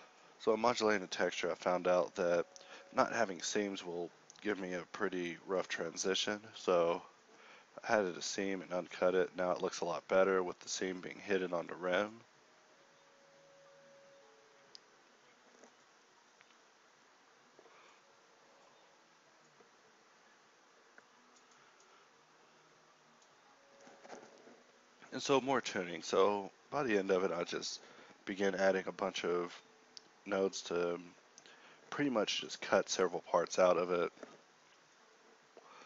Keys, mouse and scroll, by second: 1.8 a, 2.0 u, 3.1 u, 3.6 Tab, 4.0 Tab, 13.8 shift+a, 14.9 g, 15.2 shift+a, 18.9-21.3 middle drag, 22.3-24.0 middle drag, 24.4 g, 25.3 g, 25.7 ctrl+x, 26.1 g, 30.8 KP_Divide, 33.2 z, 33.5 z, 35.5 middle click.